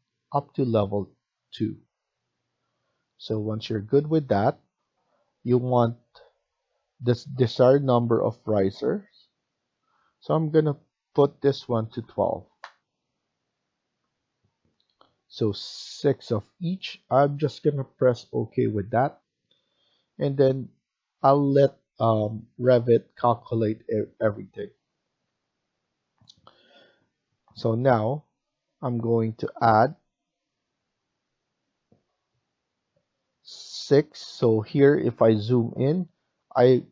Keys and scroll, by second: 4.7 F1, 11.6 typing, 12.4 Return.